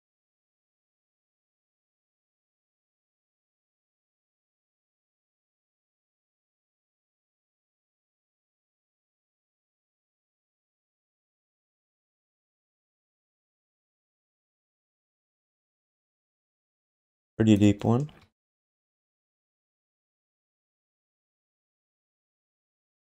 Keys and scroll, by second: 5.5 w, 5.8 x, 8.3 w, 9.1 v, 10.2 q, 12.1 q, 14.4 w.